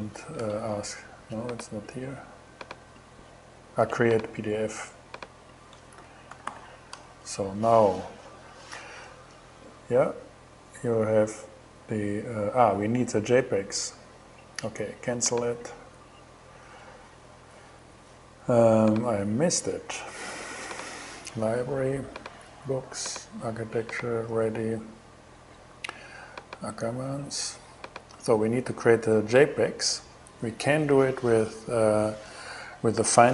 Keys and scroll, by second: 0.0 alt+shift+Return, 0.7 shift+Return, 5.3-6.5 typing.